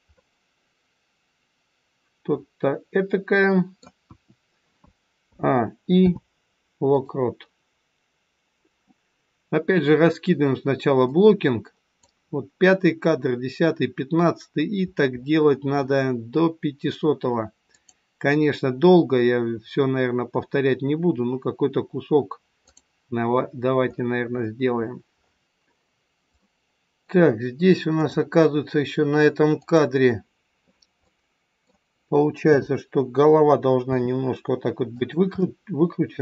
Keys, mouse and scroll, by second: 0.0 middle click, 4.0 KP_1, 5.2 a, 6.0 i, 11.0 click, 14.4-14.8 scroll down 4, 17.7 click, 17.7-18.8 scroll down 17, 23.3 scroll up 3, 24.0-25.4 scroll up 16, 26.4 middle click, 28.0 click, 29.5 click, 31.1 middle click, 32.3 KP_7, 33.8 r, 35.3 middle click.